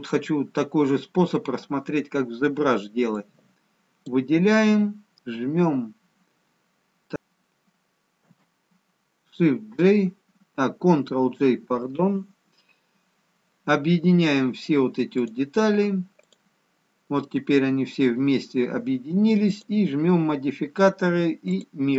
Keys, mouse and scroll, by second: 3.1 click, 7.1 ctrl+g, 8.2 ctrl+j, 15.2 click, 16.1 click, 20.3 click.